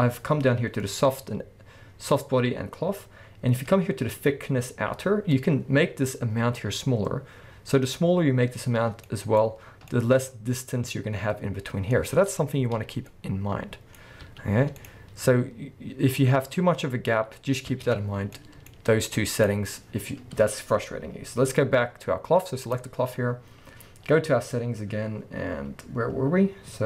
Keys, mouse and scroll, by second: 9.0-19.4 middle drag, 9.5-9.8 scroll up 1, 10.2-11.6 scroll up 1, 11.6-11.9 scroll down 1, 12.4-13.1 scroll down 1, 14.0 scroll up 2, 14.2 space, 17.8 space, 18.0-18.4 scroll down 2, 18.7-19.4 scroll up 2, 19.4 click, 20.8-22.6 scroll down 2, 22.6 click, 23.2-25.2 scroll down 1, 25.2-25.8 scroll up 1.